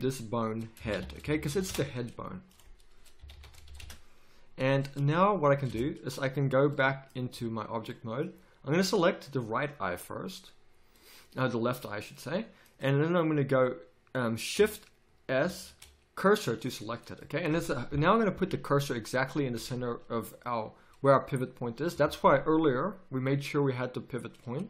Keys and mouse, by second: 5.6 Tab, 7.3 z, 8.8 z, 15.4 shift+s, 17.9 KP_3, 18.2 z, 19.5 z.